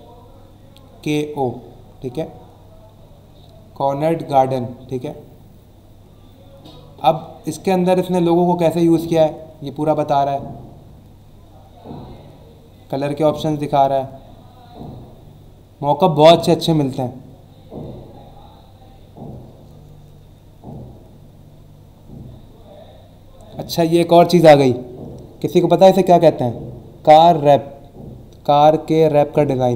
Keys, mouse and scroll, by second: 0.5 scroll down 1, 1.8-2.2 scroll down 1, 2.3-2.7 scroll down 1, 4.0-4.6 scroll up 1, 5.3-5.7 scroll down 2, 6.5-8.0 scroll down 4, 9.2-12.1 scroll down 6, 12.2 scroll down 1, 13.0-13.6 scroll down 2, 14.2 scroll down 1, 18.7 scroll down 1, 19.6-20.7 scroll down 3, 21.3 scroll down 1, 21.9 scroll up 1, 22.3-22.9 scroll down 2.